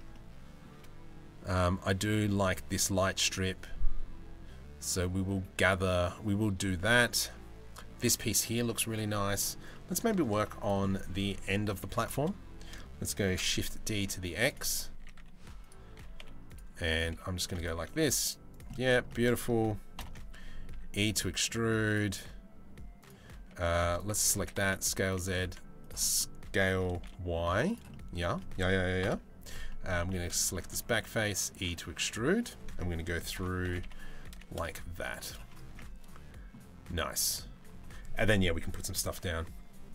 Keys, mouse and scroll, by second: 8.7 middle click, 9.3 middle click, 10.4 middle click, 10.8 Tab, 11.4 3, 11.6 click, 12.8 shift+d, 14.6-17.5 typing, 16.5 click, 18.3 middle click, 18.6 shift+middle click, 19.5 ctrl+l, 20.3 e, 23.9 s, 24.8 s, 25.6 click, 27.5 click, 28.6 ctrl+l, 29.2 click, 29.6 3, 30.5 e, 32.9 ctrl+l, 33.2 g, 35.3 Tab, 35.3-36.1 middle drag, 36.6-37.0 middle drag.